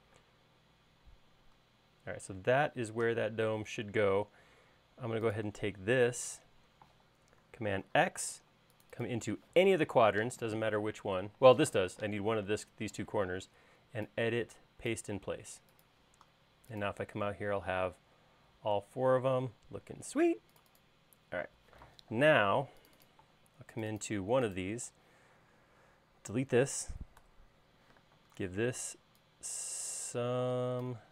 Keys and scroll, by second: 1.1 space, 8.7 super+x, 28.2 BackSpace, 28.9 p.